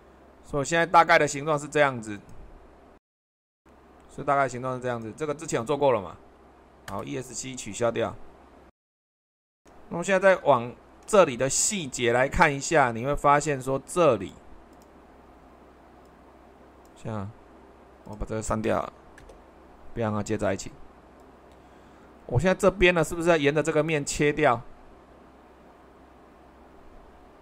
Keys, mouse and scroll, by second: 6.9 Escape, 8.8 Escape.